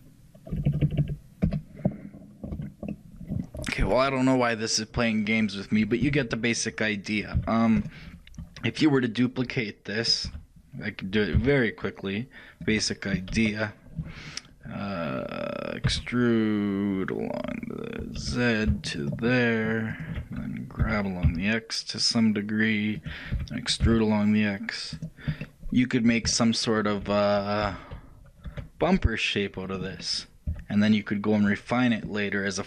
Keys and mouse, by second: 2.6 a, 3.0-8.0 middle drag, 13.4 KP_1, 16.0 e, 23.0 g, 25.5-28.2 middle drag, 27.8 e, 30.5-32.1 middle drag.